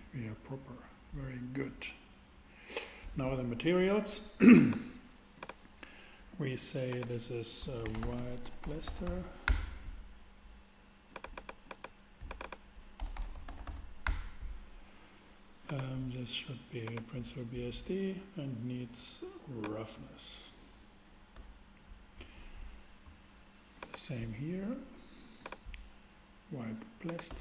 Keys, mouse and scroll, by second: 4.5-8.6 drag, 7.6-9.0 typing, 9.4 Return, 13.0-13.6 typing, 14.0 Return, 15.6-17.6 drag.